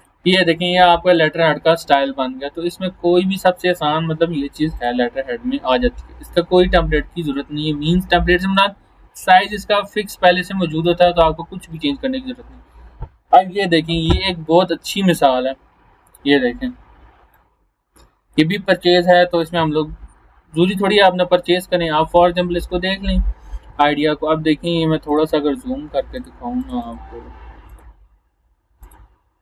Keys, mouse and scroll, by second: 4.7 click, 5.7 scroll down 1, 8.2 scroll up 1, 11.7 click, 14.7 scroll down 1, 15.5 scroll up 1, 17.3-18.6 drag, 25.0 click.